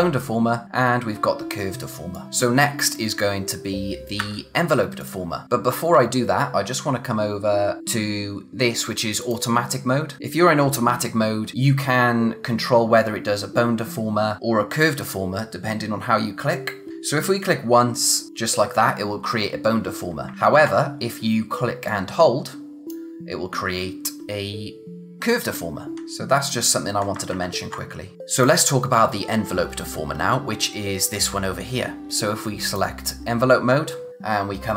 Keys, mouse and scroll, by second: 1.8 space, 2.1 click, 2.3 space, 2.4 click, 4.1 a, 5.0 click, 5.6 scroll up 1, 7.8 click, 9.1 click, 16.9 z, 18.3 click, 20.3 ctrl+z, 21.8 click, 25.9 ctrl+z, 27.3 ctrl+z, 28.1 click, 32.6 click, 34.1-34.7 scroll up 1.